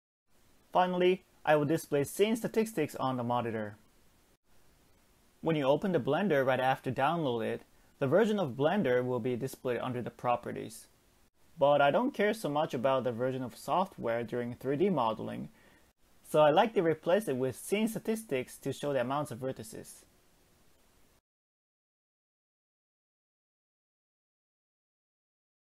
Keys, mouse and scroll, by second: 12.5-15.1 drag, 17.0-20.1 drag.